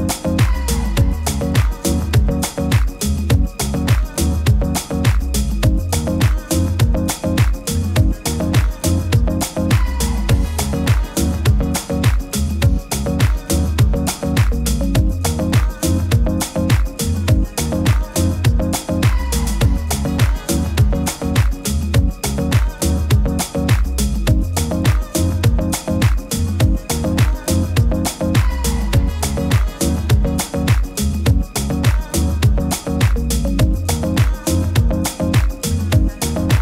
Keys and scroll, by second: 28.8 super+-, 29.0 super+-, 29.2 super+-, 33.1 super+s.